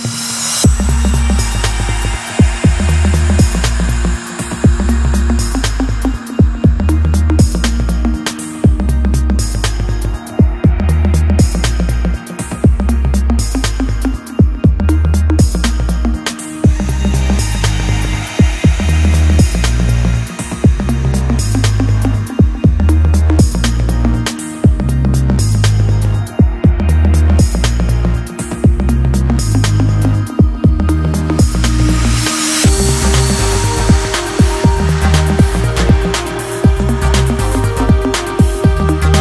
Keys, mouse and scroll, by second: 5.4-7.4 drag, 7.4 g, 13.3-15.2 drag, 15.2-17.5 middle drag, 17.5 Tab, 19.6 click, 22.1-24.4 drag, 32.4-37.5 drag.